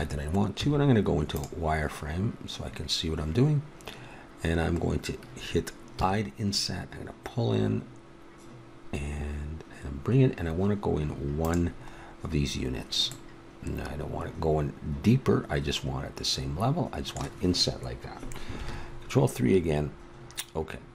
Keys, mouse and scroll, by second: 0.6 z, 5.9 i, 11.9-13.1 middle drag, 13.3 middle click, 13.7-14.8 middle drag, 18.5 ctrl+KP_3.